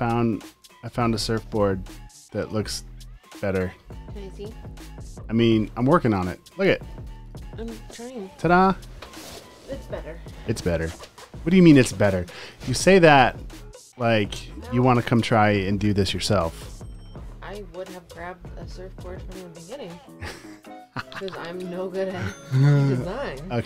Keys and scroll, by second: 0.7 super+f, 1.5 typing, 2.7-3.8 typing, 3.5 super+space, 6.1 space, 6.8 space, 7.0 space, 11.6-15.7 typing, 19.8-22.3 typing, 22.1 super+space.